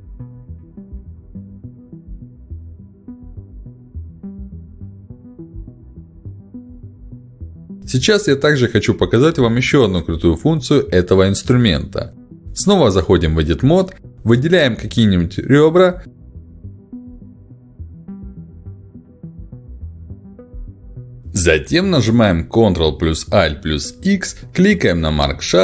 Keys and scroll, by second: 22.0 ctrl+shift+x, 23.1 Escape, 23.6 ctrl+alt+x.